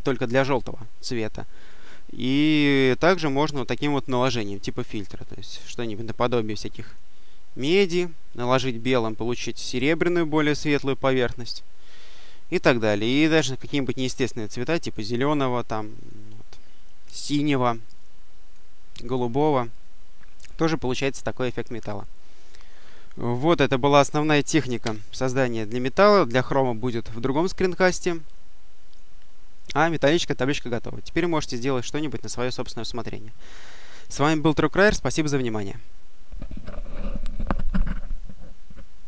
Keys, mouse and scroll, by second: 4.3-5.2 drag, 5.4 click, 6.5 click, 7.6 click, 8.4 click, 10.4 click, 12.7 click, 13.8-15.0 drag, 15.9 click, 16.9-18.8 drag, 18.9 click, 22.5 click, 24.7 Delete, 26.7 click, 28.7 click.